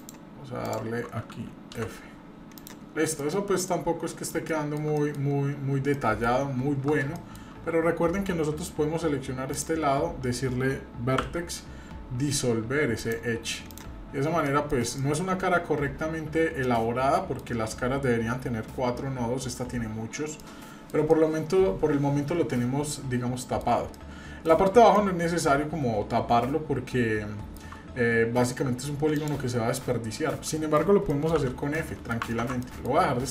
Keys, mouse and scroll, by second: 0.0-1.0 ctrl+drag, 1.8 f, 2.6 click, 2.9-3.3 scroll down 2, 3.2 middle click, 3.6 middle click, 4.5 shift+middle click, 5.0 middle click, 5.4-5.8 scroll up 1, 5.9 shift+middle click, 6.8 scroll up 2, 7.2 shift+middle click, 9.5 click, 11.2 x, 13.7 click, 14.1-14.5 scroll down 2, 14.5 middle click, 15.0 shift+middle click, 16.4 scroll down 1, 16.6 middle click, 17.6-18.2 scroll up 2, 20.1 scroll down 1, 20.4 middle click, 21.1-23.6 middle drag, 23.9 middle click, 24.9-27.6 middle drag, 27.9 scroll up 1, 29.1 alt+click, 30.5 alt+middle click, 31.1 middle click, 31.4 f, 31.8 middle click, 32.4 ctrl+z, 32.6 middle click, 32.9-33.3 scroll down 1.